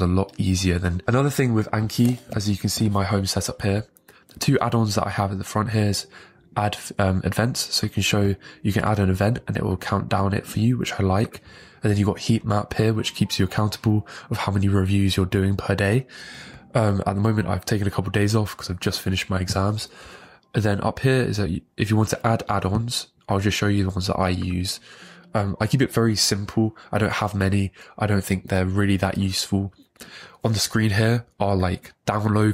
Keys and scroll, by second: 1.0 super+w, 2.5 ctrl+Page_Up.